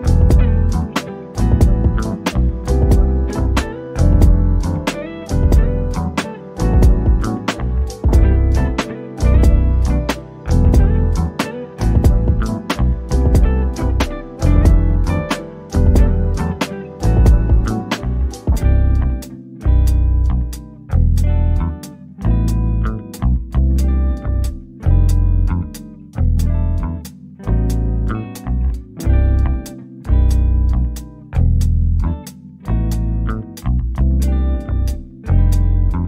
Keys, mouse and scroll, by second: 6.4 click, 7.9-8.8 scroll down 1, 11.8 shift+click, 12.2 scroll up 1, 14.0 click, 15.2 shift+click, 22.4 click, 25.3 scroll down 1, 26.1 o, 26.4 click, 27.1 scroll down 1, 27.4 click, 28.0 scroll down 1, 28.5 middle click, 28.8 scroll up 1, 29.0 click, 30.1-30.5 scroll up 1, 30.5-30.8 scroll down 1, 30.8 click.